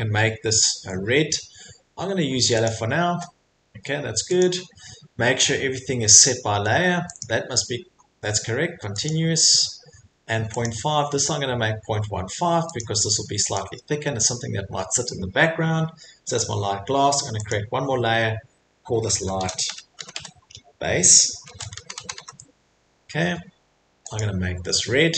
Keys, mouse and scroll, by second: 2.7 click, 4.4 click, 7.2 click, 9.1 click, 10.6 click, 12.8 click, 13.6 click, 17.5 click, 19.1-22.6 typing, 24.2 click.